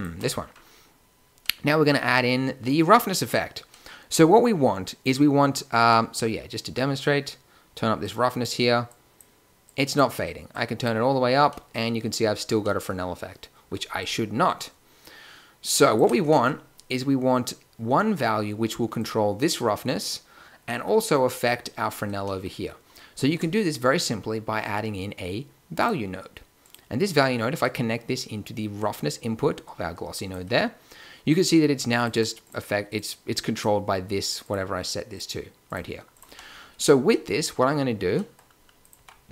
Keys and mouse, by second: 5.8 middle click, 8.0-9.0 drag, 11.6 click, 12.7 middle click, 13.9-15.7 middle drag, 18.9-25.8 drag, 23.1 shift+a, 27.6-29.4 drag, 31.9 click, 36.2 g, 38.9 g.